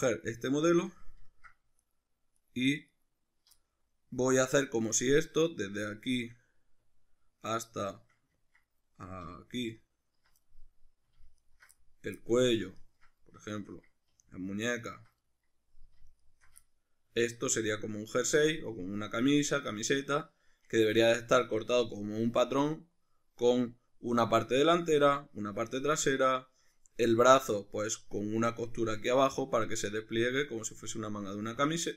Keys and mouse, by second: 0.7 z, 1.8 alt+right click, 2.4 alt+right click, 2.9 alt+right click, 3.6-9.7 middle drag, 5.5 z, 9.7 alt+shift+right click, 10.5 middle click, 11.4 alt+shift+right click, 11.8-12.8 middle drag, 12.8 alt+shift+right click, 13.5-14.8 shift+middle drag, 14.8 alt+shift+right click, 15.2-16.3 middle drag, 16.3 alt+shift+right click, 16.7-31.9 shift+middle drag.